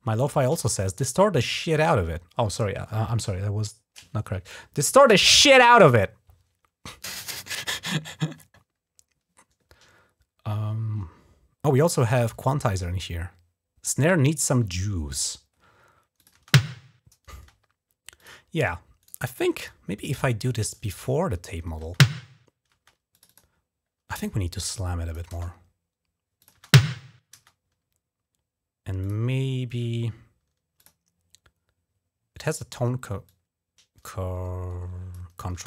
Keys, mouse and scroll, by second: 15.9 click, 16.1 space, 17.1 space, 18.0 click, 19.4-20.5 drag, 20.5 typing, 21.6-22.5 typing, 22.9 click, 23.0 click, 23.2 click, 24.5 click, 25.1 space, 26.2 click, 28.8 click, 30.6 click, 33.0-34.9 drag, 35.3 space.